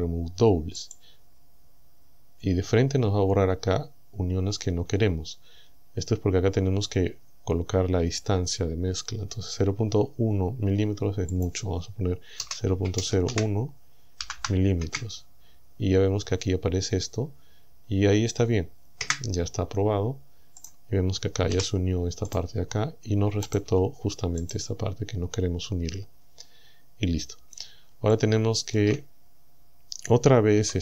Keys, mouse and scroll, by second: 0.8 click, 11.4 click, 12.4-14.2 typing, 14.9 KP_Enter, 19.0 KP_Enter, 20.6 right click, 21.6 g, 22.3 right click, 23.5 right click, 23.7 g, 24.5 right click, 25.9-26.4 scroll down 1, 26.6-27.0 scroll down 1, 28.1 shift+middle click, 29.3 scroll up 1, 29.6-30.0 scroll down 1, 30.6 Tab.